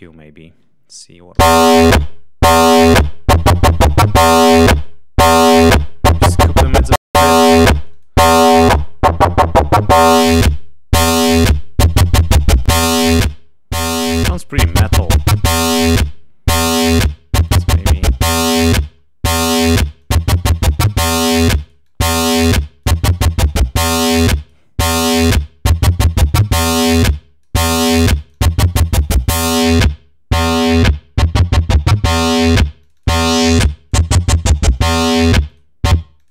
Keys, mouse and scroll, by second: 1.3 l, 1.7 click, 3.4-4.5 drag, 4.7 click, 5.1 click, 6.4 click, 7.7 click, 8.2 click, 8.8 scroll down 2, 9.2-10.6 drag, 11.2-12.3 drag, 12.9-15.2 drag, 16.4 click, 17.0 click, 18.5-18.9 scroll up 2, 19.9 click, 20.9 click, 21.4-22.5 drag, 22.7 click, 24.0 click, 24.7 click, 26.8 click, 28.1 click, 29.1 click, 31.8 click, 32.7-34.0 drag, 34.1 click, 35.4-36.3 drag.